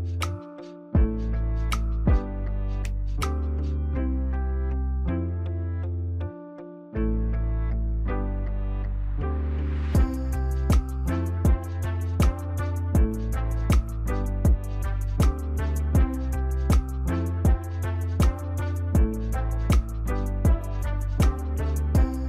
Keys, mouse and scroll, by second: 1.8 right click.